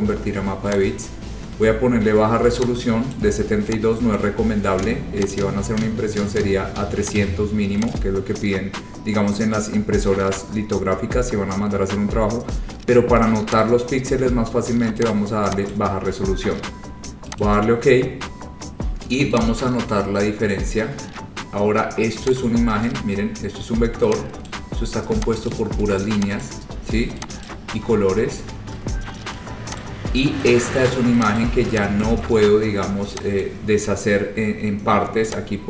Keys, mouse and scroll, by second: 0.9 click, 3.3 click, 4.3 click, 5.5 click, 7.2 click, 8.0 click, 13.7 click, 15.3 click, 15.8 click, 17.5 click, 18.3 scroll, 19.5 click, 20.1-20.7 scroll, 21.6-22.1 scroll, 22.4 click, 24.6 click, 25.6 click, 26.5 click, 27.6 click, 28.0 ctrl+z, 28.3 ctrl+z, 28.5 ctrl+z, 28.8 ctrl+z, 29.9 click, 30.7 click, 31.5 click, 32.1 click, 32.5 scroll, 32.8 scroll down 3, 33.5 click, 35.4 click.